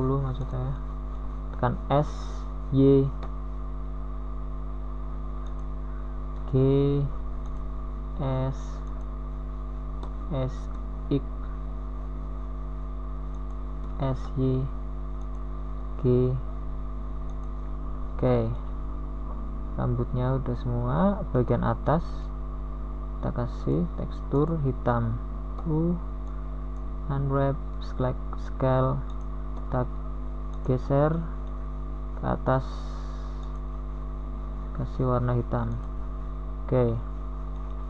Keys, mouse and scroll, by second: 1.6 r, 5.8 r, 9.0 s, 14.0 g, 15.8 s, 17.9 s, 21.6 s, 24.0 g, 26.2 a, 26.8 Tab, 30.3 Tab, 35.1 u, 36.0 s.